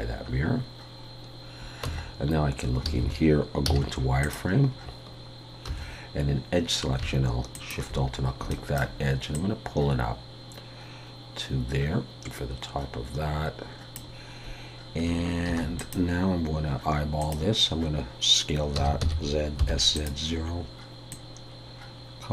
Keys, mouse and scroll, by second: 0.4 scroll down 1, 1.9 Tab, 2.9 alt+a, 3.7 z, 4.7 scroll up 2, 5.7 2, 7.5 alt+shift+click, 8.1 scroll down 2, 8.5 shift+middle click, 9.3 click, 15.5 ctrl+r, 21.1 click.